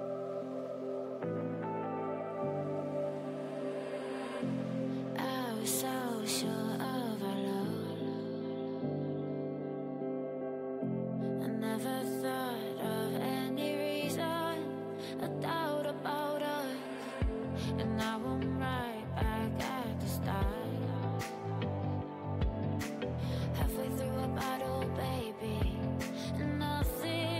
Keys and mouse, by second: 1.6 ctrl+e, 3.0 ctrl+r, 4.0-6.1 drag, 5.0 g, 6.9 click, 6.9 g, 22.4 e, 23.8 r, 25.0 g, 27.1 g.